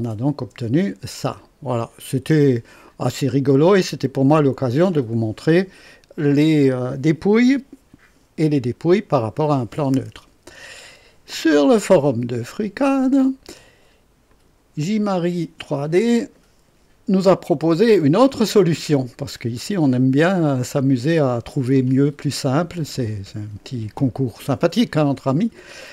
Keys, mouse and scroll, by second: 0.0 click, 0.4 space, 1.2-2.6 drag, 2.9-3.6 drag, 3.7 click, 14.3 click.